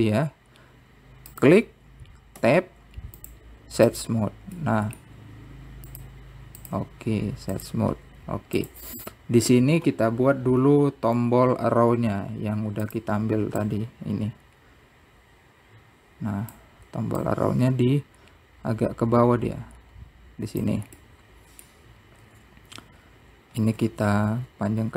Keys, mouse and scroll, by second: 0.2 Tab, 0.9-2.3 right drag, 2.3-3.6 middle drag, 3.6 click, 4.3 click, 6.0-6.3 scroll down 2, 6.3 click, 9.8-10.6 scroll down 2, 10.6 click, 11.3 click, 14.9 click, 18.7-19.9 middle drag, 19.9-20.5 scroll up 2, 20.5 scroll up 2, 20.7 scroll down 2, 21.5 s.